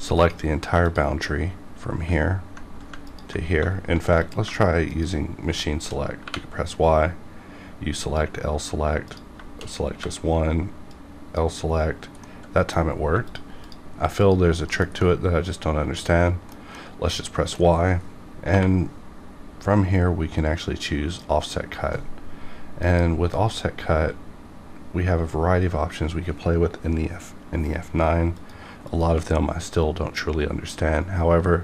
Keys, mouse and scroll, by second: 0.1 ctrl+click, 0.2 ctrl+click, 0.8 click, 3.0 ctrl+click, 4.9 shift+click, 6.2 y, 7.9 click, 8.0 click, 9.9 y, 10.8 click, 10.9-12.2 drag, 12.2 middle click, 13.2 shift+click, 14.7 KP_Decimal, 15.0-18.0 middle drag, 18.0-18.5 scroll up 2, 18.5 y, 20.9 click, 23.0 F9, 28.3 F9, 30.9 click.